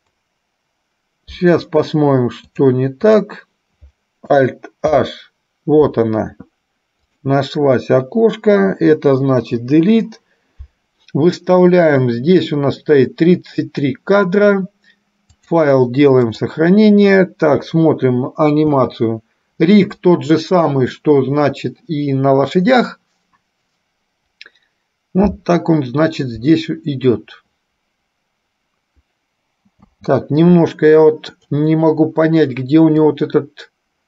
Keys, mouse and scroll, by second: 2.7 click, 5.0 alt+h, 7.3 click, 9.7 Delete, 12.1 click, 15.5-16.6 drag, 17.7 KP_3, 18.8 space, 30.1 space, 33.2-34.0 drag.